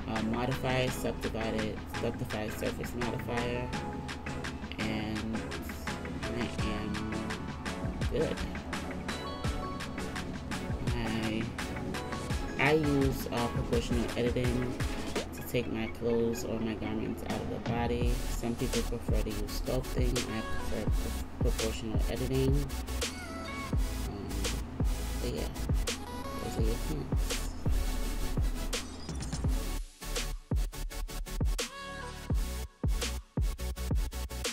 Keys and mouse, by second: 7.4 Tab, 9.9 KP_1, 12.8-15.4 middle drag, 15.1 Tab, 15.4 click, 15.5-22.8 middle drag, 19.4 g, 22.8 click, 22.9 middle click, 23.7-28.9 drag, 26.2 ctrl+z, 28.9-33.7 middle drag, 33.7-34.5 drag.